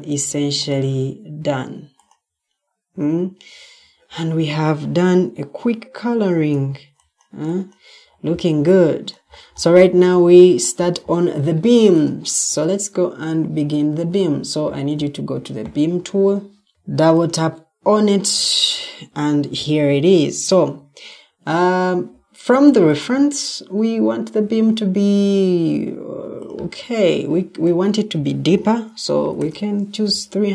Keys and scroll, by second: 12.0 °, 12.8 Escape, 29.0-29.9 typing.